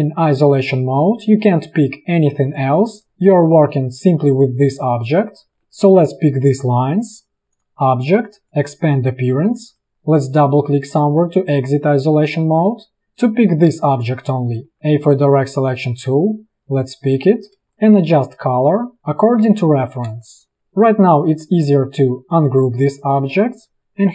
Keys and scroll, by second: 1.0 space, 14.7 a, 17.9 space, 17.9 a, 18.2 v, 19.2 v, 20.2 space.